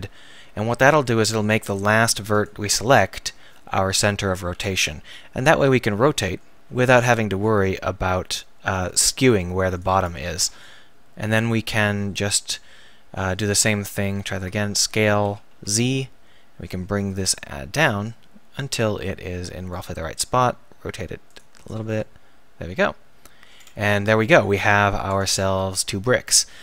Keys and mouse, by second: 0.8-2.6 middle drag, 4.0 KP_1, 5.4 r, 10.1 a, 10.4 b, 13.9 ctrl+z, 14.0 ctrl+z, 15.2 s, 19.8-21.6 drag, 20.4 r, 21.6 right click, 21.6 z, 22.2 click, 25.1 Tab.